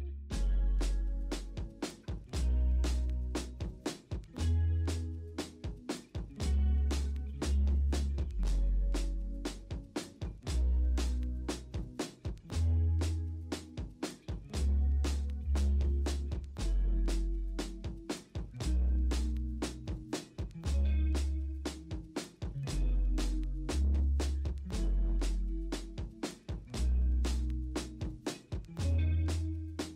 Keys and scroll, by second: 0.1 ctrl+z, 1.4 ctrl+a, 2.7 ctrl+d, 3.1 b, 3.7 l, 9.6 b, 11.0 x, 15.0 ctrl+alt+g, 17.5 ctrl+alt+g, 18.3 b, 18.8 x, 20.5 3.